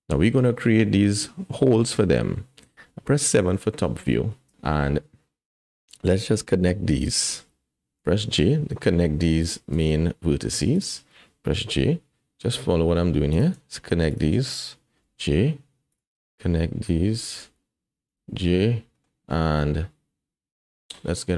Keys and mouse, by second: 3.5 KP_7, 5.7 click, 8.0 j, 9.4 click, 10.7 shift+click, 15.9 click, 19.0 click, 19.6-20.9 drag, 20.2 middle click, 20.2 j.